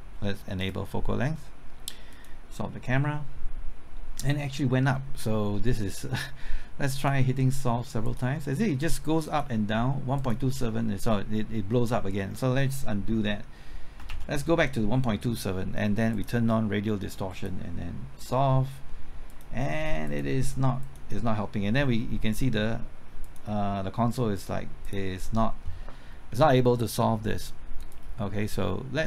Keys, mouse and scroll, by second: 14.1 ctrl+z, 16.1-29.0 drag.